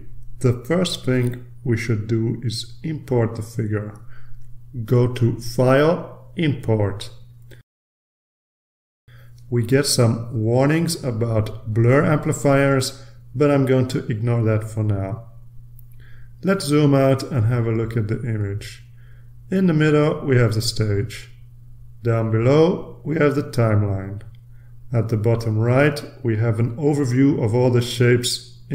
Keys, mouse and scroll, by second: 6.2 click, 8.3 click, 11.1 click, 12.2 click, 16.7 click, 18.7-19.4 ctrl+scroll down 2, 20.0-20.8 scroll down 2, 20.9-21.5 scroll up 2, 21.5-23.4 scroll up 1, 27.8 click.